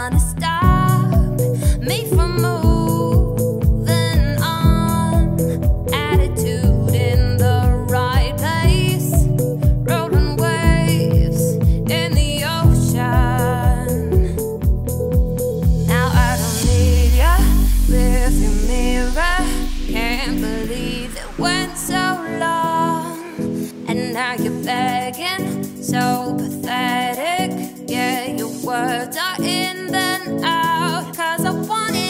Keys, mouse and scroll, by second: 0.8 Tab, 1.3 ctrl+a, 2.2 Tab, 2.7 shift+middle click, 3.2 i, 11.5 shift+middle click, 12.1 e, 14.5 g, 17.8 click, 18.4 shift+click, 18.8 middle click, 19.2 `, 19.7 middle click, 20.0 x, 21.5 /, 21.9 middle click, 22.4 2, 22.7 click, 23.4 click, 24.2 shift+click, 25.1 f, 25.7 click, 26.1 f, 26.5 f, 27.9 click, 28.3 f, 28.8 Tab, 29.1 scroll down 1, 29.3-29.9 middle drag, 29.9 /.